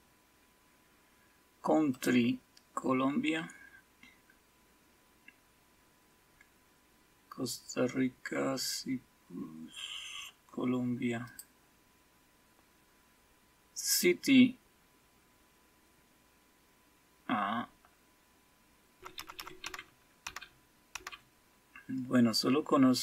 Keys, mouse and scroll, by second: 1.9 click, 3.8 scroll down 2, 4.4-7.8 scroll down 5, 7.8-8.3 scroll down 1, 8.3-8.8 scroll down 1, 8.8-9.5 scroll up 2, 9.5-11.2 scroll up 1, 11.2 click, 13.9 click, 18.9-21.4 typing, 18.9 scroll down 1.